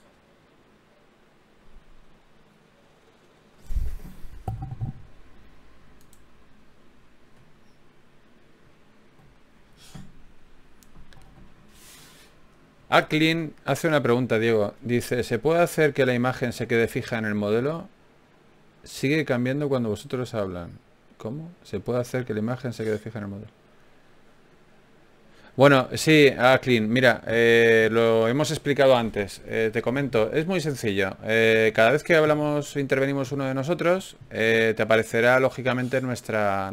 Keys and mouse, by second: 0.9 shift+q, 5.9 Tab, 6.5-10.7 drag, 10.7 Tab, 18.6 ctrl+Tab, 21.8-24.8 middle drag, 24.8-27.1 drag, 27.2-34.2 drag, 31.8 f, 32.8 f, 35.0-36.7 drag, 35.4 f.